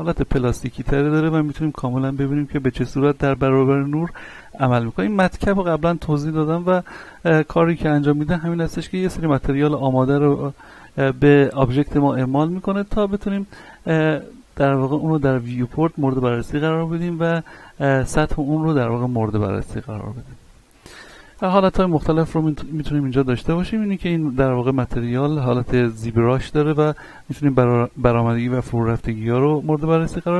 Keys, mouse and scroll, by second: 2.5 scroll down 1, 2.8 shift+middle click, 3.3-5.7 middle drag, 5.7-7.7 middle drag, 7.7 middle click, 8.4 scroll up 1, 8.8 middle click, 9.6-10.2 scroll down 1, 10.2-11.8 middle drag, 11.8-14.3 middle drag, 14.3-19.2 middle drag, 19.2-19.9 scroll up 1, 19.9 middle click, 20.1 scroll up 1, 20.7-21.3 scroll down 1, 21.3 click, 22.4-24.8 middle drag, 24.8-30.2 middle drag, 30.2 click.